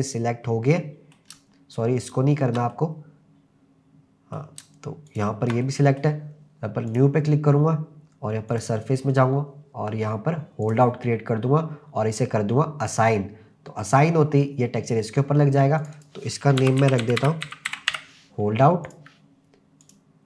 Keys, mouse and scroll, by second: 2.0 shift+click, 2.7-4.4 middle drag, 5.1 shift+click, 5.6 middle click, 6.9 click, 8.5-10.9 drag, 12.8 click, 13.8 click, 15.8 click, 16.0-19.0 drag, 19.8 click.